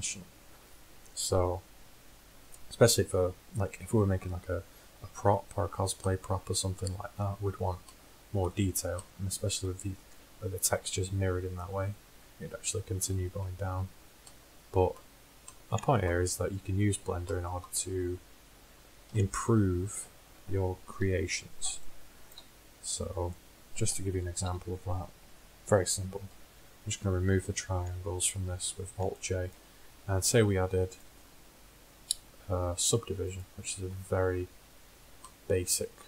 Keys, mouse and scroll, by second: 6.2-15.8 middle drag, 19.1 KP_1, 24.4 a, 24.5 a, 26.6 alt+j, 31.1-33.0 drag.